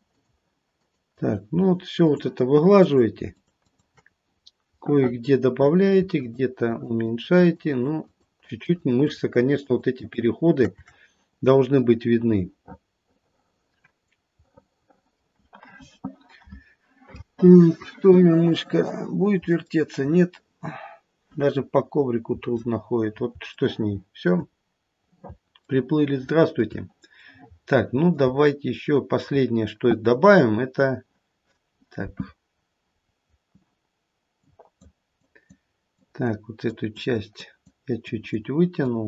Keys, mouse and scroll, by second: 0.1 shift+click, 0.8 shift+click, 1.1 shift+click, 1.5 shift+click, 1.9 shift+click, 2.8 shift+click, 3.3 shift+click, 3.6 shift+click, 4.2-4.8 scroll down 1, 4.8 middle click, 4.8-5.4 scroll down 1, 6.1 shift+click, 6.7 shift+click, 7.0 shift+click, 7.7 shift+click, 8.4 shift+click, 8.6 shift+click, 8.9 shift+click, 9.3 shift+click, 9.6 shift+click, 10.0 shift+click, 11.3-12.0 scroll down 1, 12.0 middle click, 12.6 middle click, 13.9-14.3 scroll down 1, 15.0 middle click, 19.8 middle click, 23.6 shift+middle click, 24.4-25.2 scroll down 4, 25.8 shift+middle click, 26.2 shift+middle click, 27.1 middle click, 28.6 shift+middle click, 30.6-31.5 scroll up 2, 32.5-33.0 scroll up 2, 33.0-34.3 scroll down 1, 34.3 click, 35.2 click, 35.9 click, 36.7 click, 37.3 click, 38.1 click, 38.8 click.